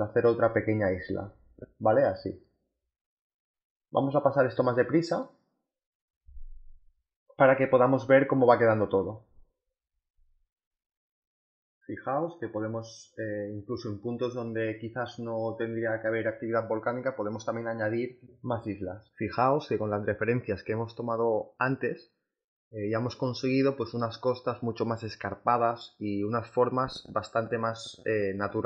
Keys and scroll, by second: 4.7 z, 4.9 b, 6.0 z, 6.4 space, 6.5 b, 9.4 space, 11.7 space, 13.0-14.7 typing, 15.7-17.9 typing, 18.4 ctrl+z, 21.2 z, 22.8 space, 26.5 b, 28.0 space.